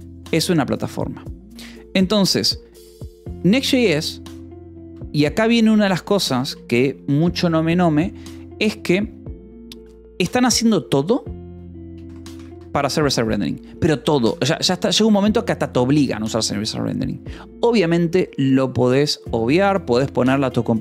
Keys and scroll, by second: 5.3 a, 5.7 Return, 6.2 :, 6.4 space, 12.4 Escape, 14.4 o, 15.8 Escape.